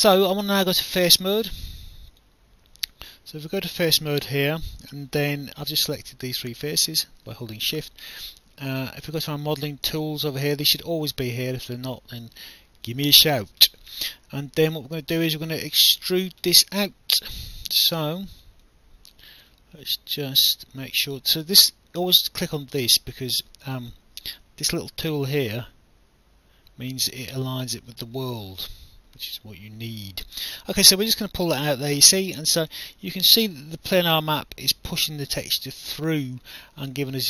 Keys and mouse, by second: 0.5 right click, 2.1 click, 2.8 shift+click, 9.1 click, 12.9 alt+click, 15.7 click, 18.1 alt+click, 22.6 click, 23.9 alt+click, 25.3 alt+click, 29.2 click.